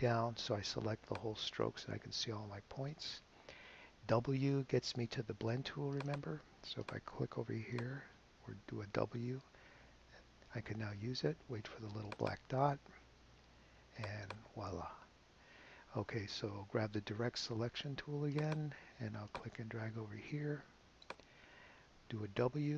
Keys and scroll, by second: 8.4 w, 22.4 w.